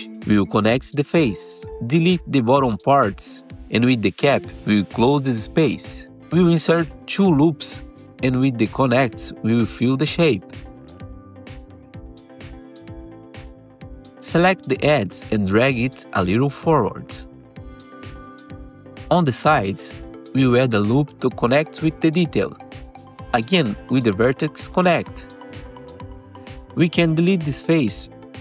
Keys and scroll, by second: 1.6 Delete, 2.9 3, 5.3 1, 6.0 alt+1, 10.3 ctrl+shift+e, 10.8 alt+x, 12.3 ctrl+shift+e, 13.7 2, 20.7 1, 21.9 alt+1, 25.5 ctrl+shift+e, 28.0 ctrl+shift+e.